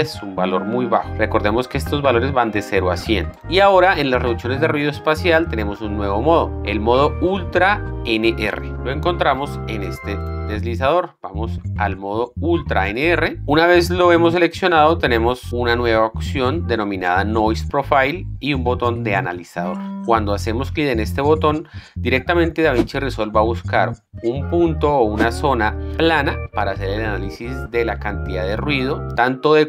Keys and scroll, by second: 1.0 KP_0, 1.1 Return.